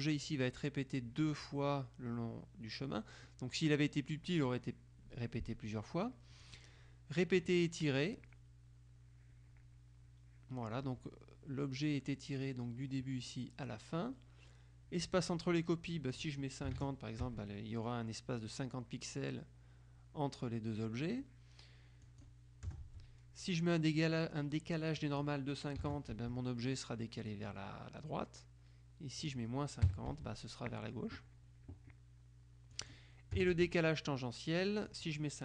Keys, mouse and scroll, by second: 6.5 click, 16.0 click, 16.8 KP_5, 16.9 KP_0, 17.3 Tab, 22.1 click, 22.8 KP_0, 22.9 Tab, 25.1 click, 25.9 KP_5, 26.0 KP_0, 26.2 Tab, 29.3 click, 29.9 KP_Subtract, 30.2 Tab, 32.9 click, 33.5 KP_0, 33.6 Tab, 35.0 click.